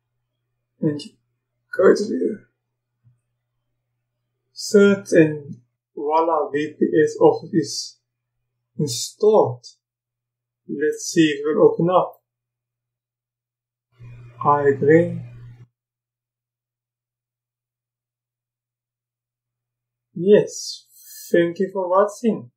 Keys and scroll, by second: 3.1 w.